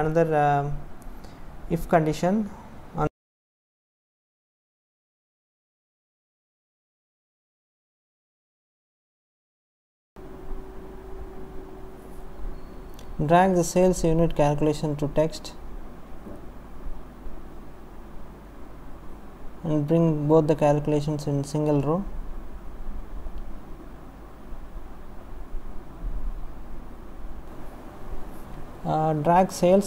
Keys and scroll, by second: 0.5 Right, 0.6 space, 2.9 Down, 6.0 space, 6.4 space, 7.3 Left, 8.1 Right, 9.2 space, 18.9 Delete, 21.0 Delete.